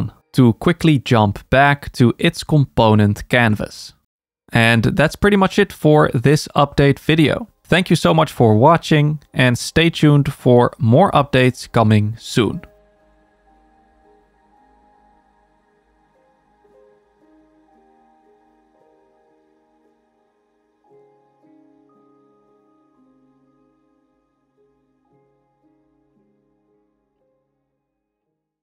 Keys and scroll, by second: 5.2 super+k.